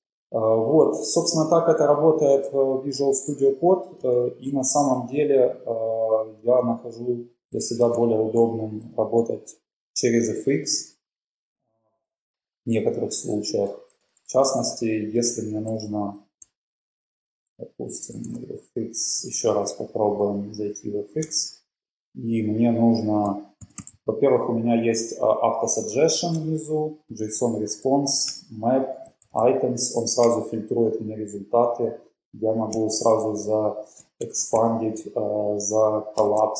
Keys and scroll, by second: 2.3 Down, 2.3 Down, 2.5 Down, 4.3 alt+super+], 5.2 Down, 5.3 Down, 5.4 Down, 6.6 Up, 7.9 ctrl+`, 13.0 typing, 16.7 typing, 17.9-19.3 typing, 21.3 Return, 23.2-24.6 typing, 27.1-29.9 typing, 30.4 Return, 34.0-34.8 typing, 36.4-36.5 typing.